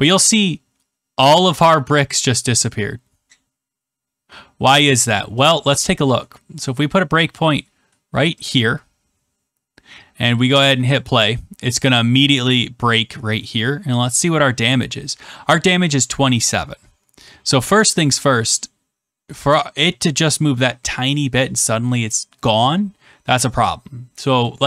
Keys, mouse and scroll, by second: 10.9-12.1 drag, 24.4 click.